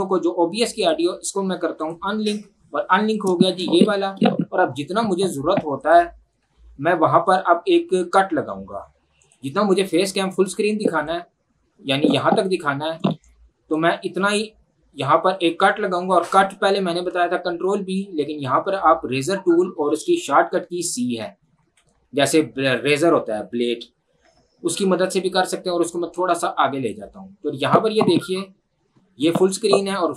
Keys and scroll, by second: 2.1 Delete, 20.2 ctrl+1, 21.7 Escape, 24.2 v.